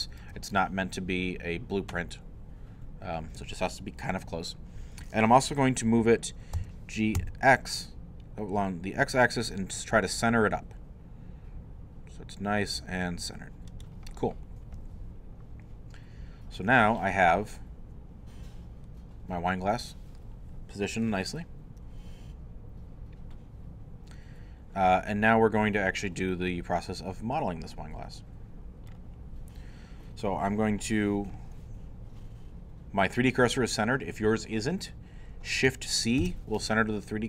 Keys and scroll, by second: 6.5 g, 7.2 x, 36.2 shift+c.